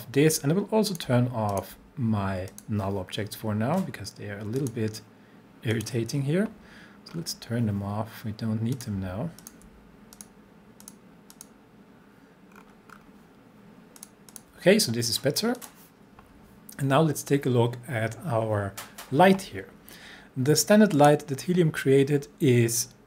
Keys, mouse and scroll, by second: 1.5 shift+click, 2.5 click, 7.1-7.4 scroll down 1, 8.7 click, 9.4 shift+click, 10.1 click, 12.5-13.4 scroll down 1, 14.0 click, 15.5 click, 20.9 click.